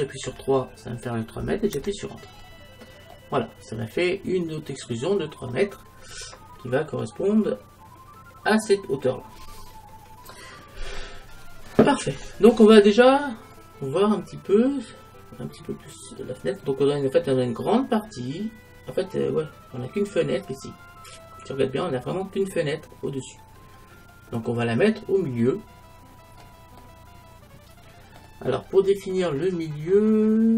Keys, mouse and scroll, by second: 2.5-5.0 middle drag, 12.9-18.1 middle drag, 26.8 middle click, 27.5 middle click, 28.8-29.4 scroll up 1, 30.3-30.5 middle drag.